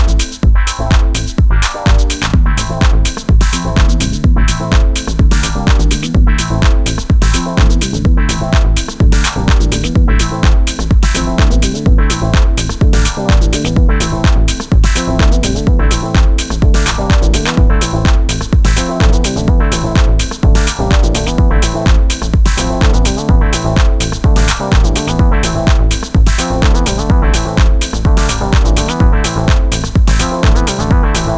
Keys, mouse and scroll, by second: 1.1-1.9 middle drag, 7.1 Tab, 9.7 middle click, 13.1-17.9 drag, 17.9 KP_1, 24.0 z, 25.3 a.